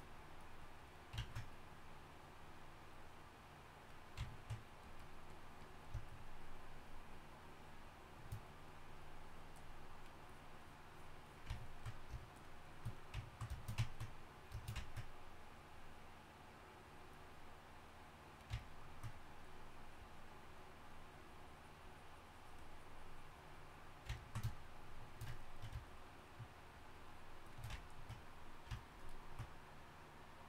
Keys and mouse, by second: 18.6-30.4 drag.